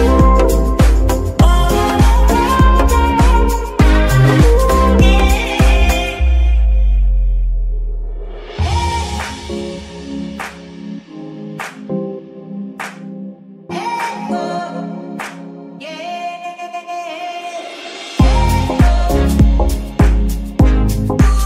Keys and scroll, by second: 1.5 g, 2.4 Escape, 4.1 g, 14.8 BackSpace, 17.4-17.9 typing, 20.1 shift+-, 21.1 Return.